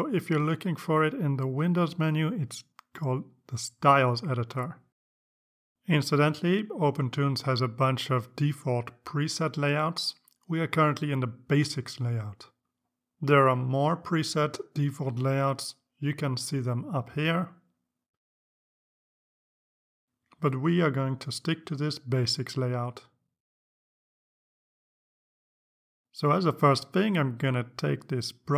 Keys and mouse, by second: 1.4 click, 6.5 click, 15.1 click, 16.8 click, 18.7 click, 19.6 click, 20.3 click, 21.5 click.